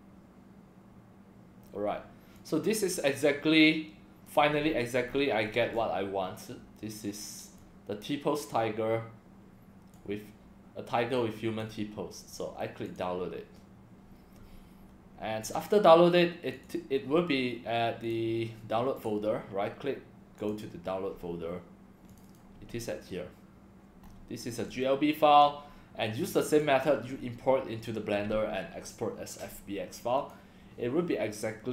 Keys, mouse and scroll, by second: 2.4-4.3 drag, 4.6-5.2 scroll up 7, 5.5-5.9 scroll down 4, 6.3-7.3 middle drag, 7.6-9.9 drag, 11.2 click, 12.9 click, 16.5 click, 18.0 click, 19.0 right click, 20.4 click, 22.1 click, 22.3 click, 24.1 scroll up 1, 24.4 scroll down 1, 24.7-25.4 drag, 26.5 click, 30.2 click, 31.4-31.7 drag.